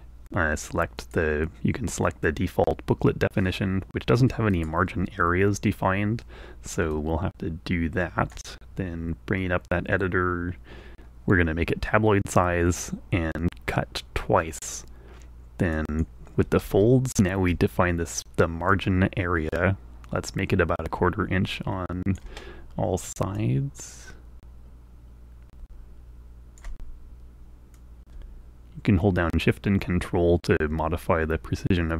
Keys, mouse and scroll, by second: 1.0 click, 3.8-5.4 drag, 7.5-9.1 alt+drag, 16.3 click, 19.2-22.4 drag, 23.9-27.4 drag, 28.2-31.9 drag.